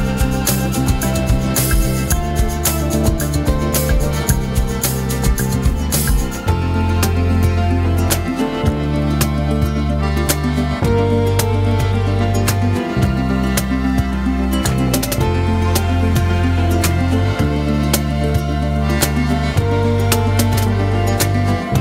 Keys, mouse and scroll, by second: 1.7 r, 5.4-7.4 middle drag, 7.4 click, 9.6 click, 10.8-13.8 middle drag, 14.5-15.3 scroll up 1, 15.3 click, 16.5 r, 19.5 click, 20.5-21.8 middle drag.